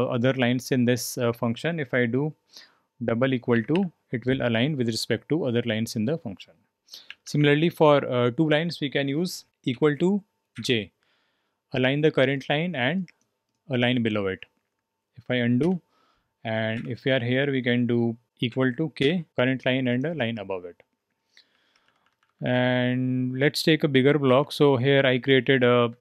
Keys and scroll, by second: 3.5 =, 3.7 =, 7.1-7.8 typing, 9.7-10.5 typing, 15.6 typing, 16.7 typing, 18.5-19.0 typing, 21.5-22.5 typing, 24.4-26.0 typing.